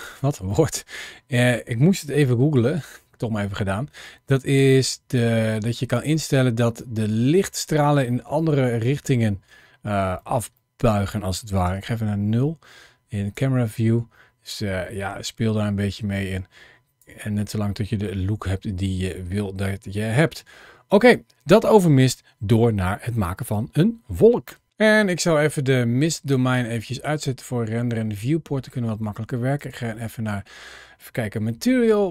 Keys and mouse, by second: 0.3 middle click, 2.2 shift+middle click, 2.5-3.0 middle drag, 3.4 shift+middle drag, 4.4-5.9 drag, 6.7-7.1 middle drag, 7.9 shift+middle click, 8.6-9.3 middle drag, 10.5 middle click, 11.5 KP_0, 13.3-16.9 drag, 25.9 click, 27.8-28.5 middle drag, 29.6 click, 31.4 shift+middle drag, 31.9 middle drag.